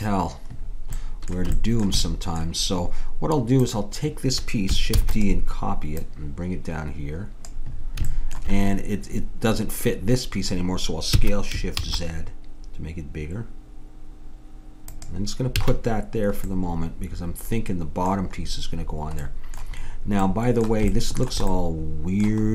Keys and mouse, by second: 1.0-3.7 middle drag, 3.7-4.8 right drag, 4.8 click, 5.0 shift+d, 6.0-7.8 drag, 11.2 s, 15.6 a, 16.6-19.3 middle drag.